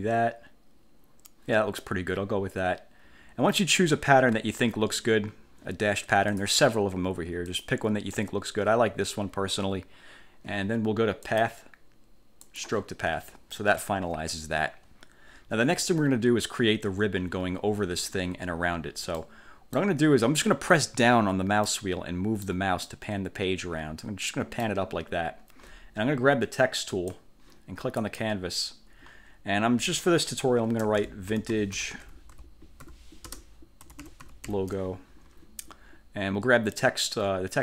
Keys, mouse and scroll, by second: 6.5 click, 7.6 click, 11.4 click, 12.6 click, 19.3 middle click, 21.8-22.8 middle drag, 23.0 middle click, 23.6 click, 27.0 click, 28.1 click, 30.9-35.0 typing.